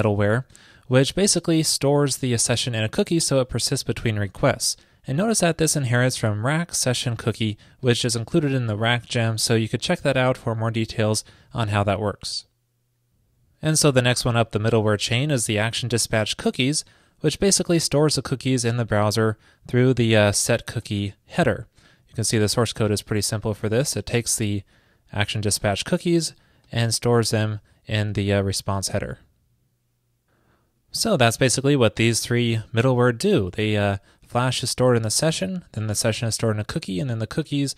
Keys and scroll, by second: 33.7 super+v.